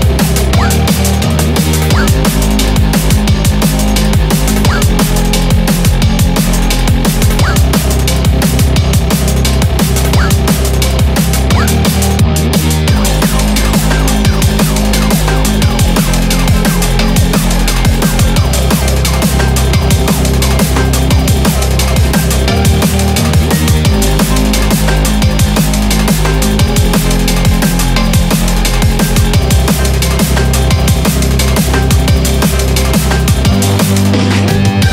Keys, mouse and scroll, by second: 12.0 scroll down 5, 12.3 shift+middle click, 12.5 scroll up 2, 12.6 click, 12.6 scroll down 1, 12.8 scroll up 4, 13.2 shift+middle click, 14.1 e, 16.8 ctrl+z, 16.8 g, 18.0 g, 26.1 click, 27.2 s, 29.0 f, 29.8 g.